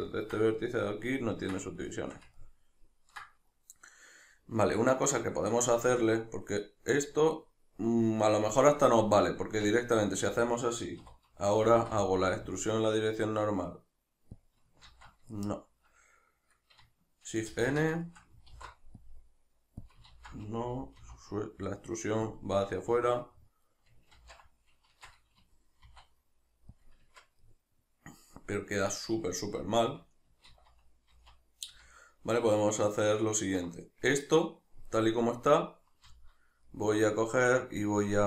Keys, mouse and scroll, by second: 5.8 Tab, 9.4 Tab, 11.0 3, 11.7 alt+e, 14.5 click, 14.9 ctrl+z, 15.3-19.9 shift+middle drag, 17.5 shift+n, 18.5 alt+e, 19.9 click, 20.1 ctrl+z, 22.4 click, 22.5-26.9 middle drag, 24.1 ctrl+z, 24.9 shift+Tab, 25.9 e, 26.9 click, 27.1 Tab, 27.4-38.2 middle drag, 29.6 Tab, 30.5 ctrl+z, 36.0 z.